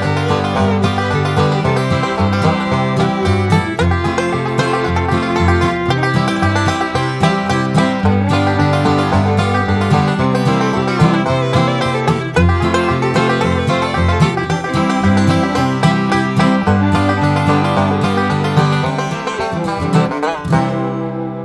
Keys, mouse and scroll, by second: 0.2 Escape, 0.5 click, 1.4 click, 3.6 click, 5.2 click, 6.7 click, 8.1 click, 8.7 Escape, 8.9 click, 10.8 click, 13.5 click, 16.1 click, 17.5 click, 18.1 Escape, 18.5 click, 18.9 click, 20.3 click.